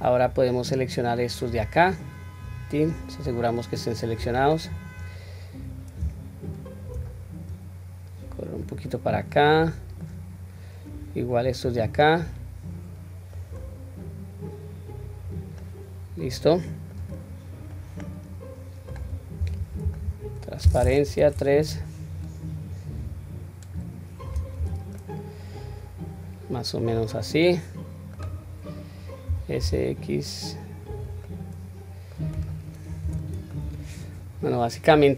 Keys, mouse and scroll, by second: 1.9-2.9 drag, 3.2-4.1 middle drag, 4.5-5.0 scroll down 1, 6.5 shift+click, 7.5 click, 8.9 scroll down 1, 9.2-10.0 middle drag, 11.0-11.4 drag, 11.8-13.4 middle drag, 14.0 click, 14.7 click, 15.6-17.0 middle drag, 17.7-19.1 middle drag, 19.4 q, 19.9 middle click, 21.0 KP_3, 21.6-22.2 drag, 22.7-23.7 drag, 24.6 q, 24.9-28.1 middle drag, 31.2-32.2 middle drag, 32.3 click, 33.0 Tab, 33.5-35.1 middle drag.